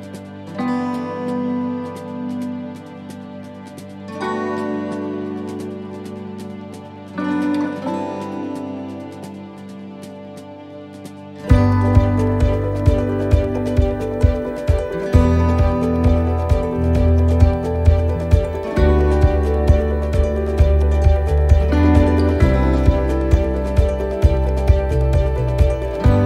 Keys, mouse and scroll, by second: 0.8 r, 4.7 middle click, 6.0 click, 6.8 middle click, 8.7 click, 11.5 middle click, 12.2-12.5 scroll down 1, 12.9 middle click, 12.9-13.3 scroll down 3, 13.9-14.4 scroll down 2, 14.2 middle click, 14.6 scroll up 2, 15.5 click, 16.4 right click, 17.5 click, 19.0-19.5 scroll up 4, 19.5 middle click, 20.2 shift+middle click, 21.0 middle click, 23.6 right click, 24.9 click.